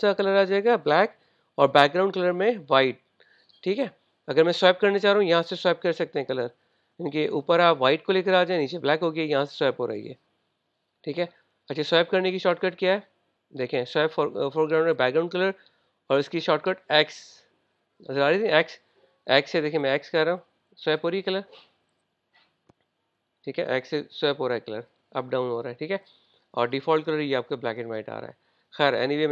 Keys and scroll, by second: 22.2 x, 23.7 x, 24.3 x, 24.7 x, 27.7 typing.